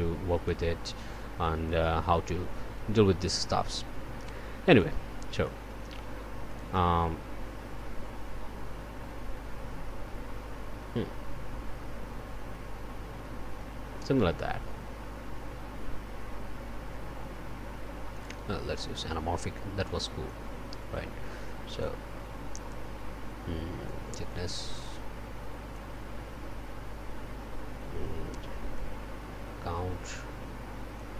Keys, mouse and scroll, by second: 1.6-5.0 drag, 5.4 click, 6.5 click, 18.1 click, 20.2-22.0 drag, 23.8-26.0 drag, 28.7-31.1 drag.